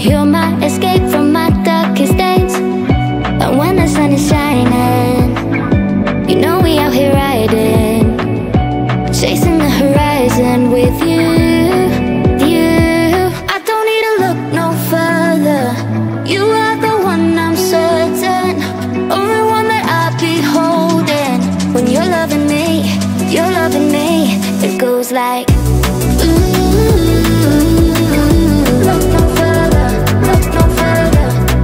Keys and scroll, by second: 26.7-31.6 typing.